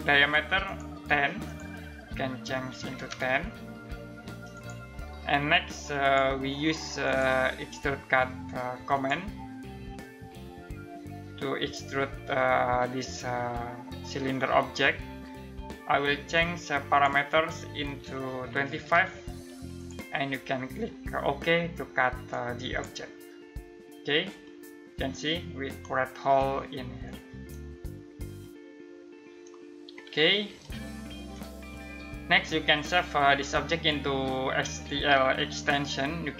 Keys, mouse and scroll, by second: 2.5-3.3 typing, 4.1 click, 15.9 click, 17.8-18.9 typing, 19.3 click, 21.9 click, 24.0 middle click, 29.4-30.0 scroll up 1, 30.2 ctrl+middle click, 31.3 middle click.